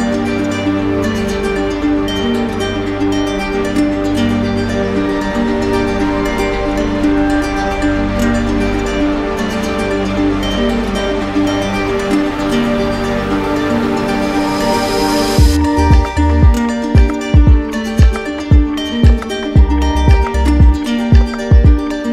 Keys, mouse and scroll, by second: 6.2 alt+right click, 6.8 alt+right click, 7.4 alt+right click, 8.9 alt+right click, 10.7 right click, 11.4 alt+right click, 12.9 alt+right click, 13.6 right click, 17.9 right click, 18.7 right click.